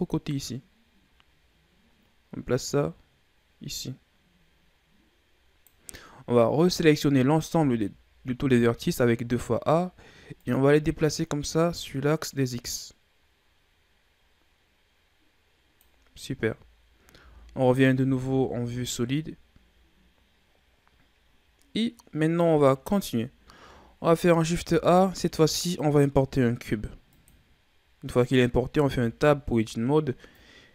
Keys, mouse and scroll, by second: 7.5 a, 8.4 a, 10.4-13.5 drag, 16.2 a, 17.2 z, 17.5-17.9 scroll down 2, 17.9 Tab, 18.3 a, 18.5-19.5 scroll down 9, 23.9-24.5 ctrl+scroll down 1, 24.5 shift+a, 28.8 Tab, 30.3-30.7 drag.